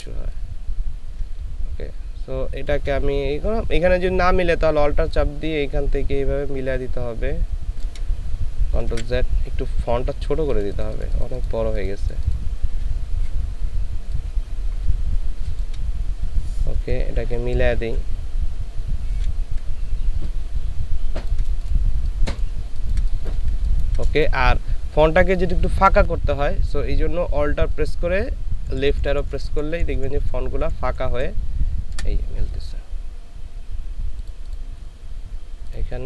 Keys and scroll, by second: 8.9 ctrl+alt+z, 16.8 Up, 17.2 Up, 17.9 Up, 21.9 ctrl+alt+space, 28.7 alt+Right, 29.3 alt+Right, 30.0 alt+Right.